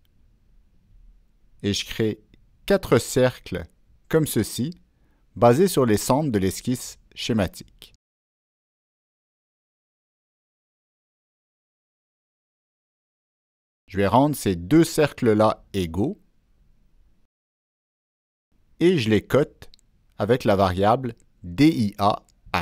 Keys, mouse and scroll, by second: 1.5 right click, 3.6 click, 4.3 click, 5.3 click, 6.0 click, 6.8 click, 7.3 click, 8.3 click, 9.1 click, 15.4-16.6 drag, 17.9 click, 18.7 right click, 20.2 click, 20.4 right click, 21.0 right click, 21.4 click, 21.4 right click.